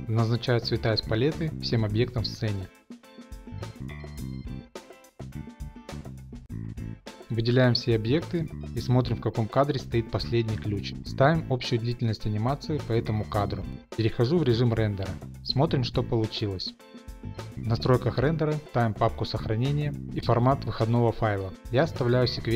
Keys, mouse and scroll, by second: 0.5 click, 1.5 ctrl+v, 2.0 Return, 2.5 click, 2.6 click, 2.7 ctrl+v, 2.7 Return, 2.7 click, 2.8 click, 3.0 ctrl+v, 3.0 Return, 3.0 click, 3.1 click, 3.3 click, 3.4 click, 3.4 click, 3.5 ctrl+v, 3.5 Return, 3.5 click, 3.6 shift+middle click, 3.7 ctrl+c, 3.7 click, 3.8 click, 3.9 ctrl+v, 3.9 Return, 3.9 click, 4.0 ctrl+c, 4.0 click, 4.1 click, 4.2 click, 4.3 ctrl+c, 4.3 click, 4.4 ctrl+v, 4.4 click, 4.5 ctrl+c, 4.5 click, 4.5 click, 4.6 ctrl+v, 4.7 ctrl+c, 4.7 click, 4.7 click, 4.8 ctrl+v, 4.8 click, 4.9 ctrl+c, 4.9 click, 5.0 click, 5.1 ctrl+v, 5.2 click, 5.3 ctrl+c, 5.3 click, 5.3 click, 5.5 click, 5.6 ctrl+c, 5.6 click, 5.7 ctrl+v, 5.7 click, 5.8 click, 5.9 ctrl+v, 5.9 click, 6.0 ctrl+c, 6.0 click, 6.0 click, 6.1 ctrl+v, 6.1 click, 6.2 click, 6.4 ctrl+v, 6.4 click, 6.5 ctrl+c, 6.5 click, 6.5 ctrl+v, 6.5 click, 6.6 click, 6.7 ctrl+v, 6.7 Return, 6.8 ctrl+c, 6.8 click, 6.9 ctrl+v, 6.9 Return, 6.9 click, 7.0 ctrl+c, 7.0 click, 7.1 ctrl+v, 7.1 Return, 7.1 click, 7.1 middle click, 8.2 click, 9.5 click, 10.8 click, 11.7 Return, 12.4 middle click, 12.5 middle click, 13.3 shift+middle click, 14.6-14.9 z, 14.9 click, 17.2 middle click, 18.1 click, 19.4 click, 20.8 click.